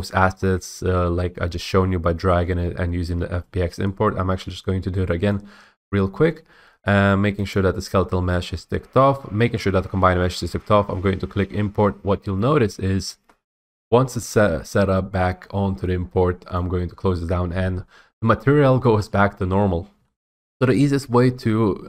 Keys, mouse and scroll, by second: 0.4 scroll, 0.5-1.5 scroll, 1.5 scroll up 1, 5.4 click, 7.7 click, 11.2 click, 16.7 click, 19.1-20.1 typing, 20.3-21.8 middle drag.